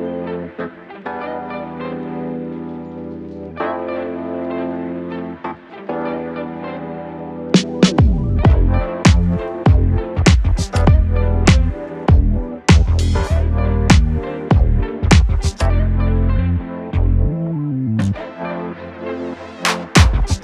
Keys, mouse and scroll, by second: 0.9-3.5 typing, 4.1 Return, 7.3 click, 7.4-8.1 typing, 9.4-11.4 typing, 12.6 click, 15.7 scroll down 1, 18.5 scroll up 1, 18.6-20.4 drag.